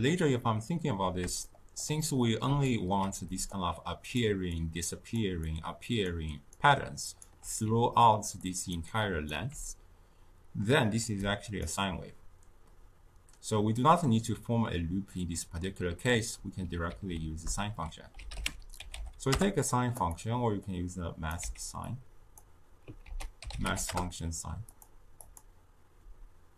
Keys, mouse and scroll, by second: 1.4-3.2 shift+middle drag, 3.2-9.5 typing, 3.4 click, 4.5 click, 4.9 click, 5.4 click, 6.5 right click, 8.4 click, 8.8 click, 11.1-14.2 drag, 16.8 ctrl+a, 20.6-21.4 drag, 21.4 x, 21.8 click, 23.0 ctrl+a, 25.2-26.5 drag.